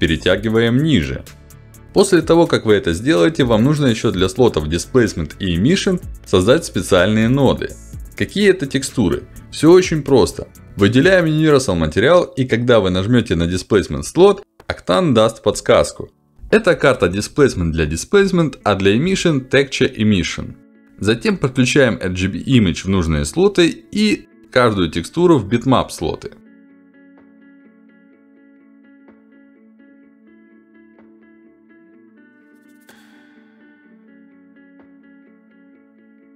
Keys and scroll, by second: 5.1 ctrl+alt+d.